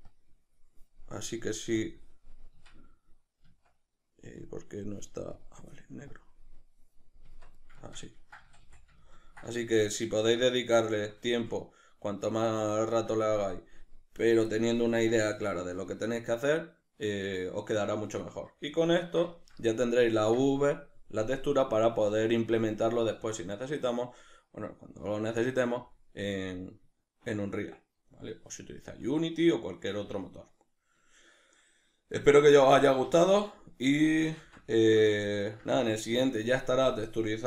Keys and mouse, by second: 2.7 Tab, 6.1 click, 7.4 Tab, 8.3-37.4 ctrl+middle drag, 8.4 a, 32.9 a, 34.4 shift+c.